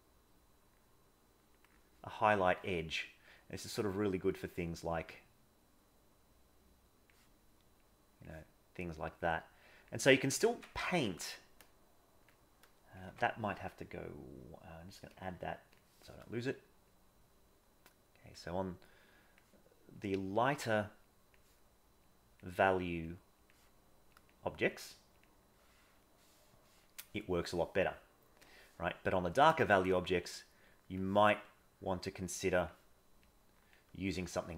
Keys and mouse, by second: 2.1 middle click, 3.8 click, 5.3 click, 6.3 click, 7.9 click, 8.9 click, 10.5 ctrl+z, 11.6 click, 13.1 ctrl+z, 16.9-18.3 drag, 19.1 click, 20.0 click, 21.1 click, 22.1 click, 22.7 click, 24.1 click, 26.1 middle click, 29.6-31.0 drag, 31.8 click, 33.2 click, 34.3 middle click.